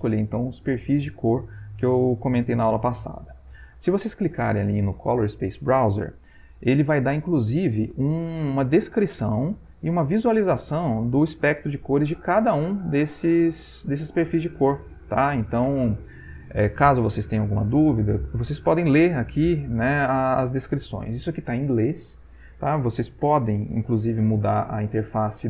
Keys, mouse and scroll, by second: 2.8 click, 8.8 click, 9.3 click, 10.6 click, 11.0 click, 11.4 click, 12.4 click, 12.9 click, 13.4 click, 15.0 click, 19.3-21.3 drag.